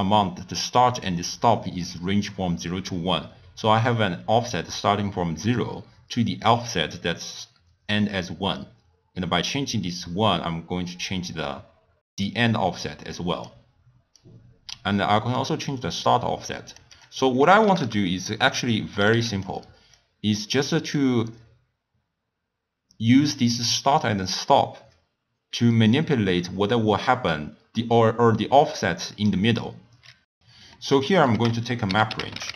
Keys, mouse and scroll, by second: 8.5-11.6 drag, 14.2-19.4 drag, 19.9-23.0 drag, 30.7 middle click, 31.3 ctrl+a.